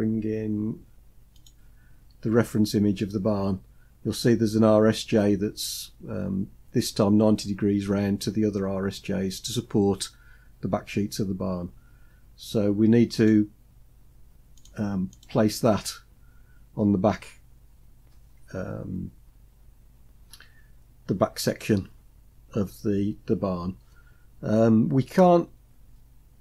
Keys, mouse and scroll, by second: 1.3 click, 2.5 click, 2.7-4.1 scroll up 3, 11.4 scroll down 1, 12.5-12.9 scroll down 3, 12.9-14.2 drag, 14.3 click, 14.9 click.